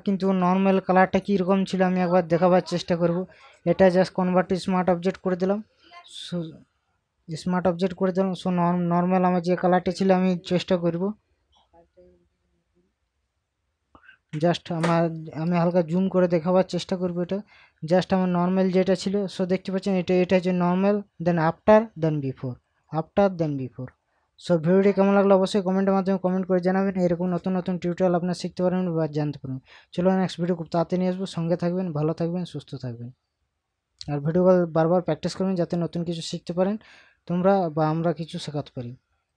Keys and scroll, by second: 12.7 KP_Subtract, 15.5 ctrl+KP_Add, 25.2 ctrl+KP_Subtract.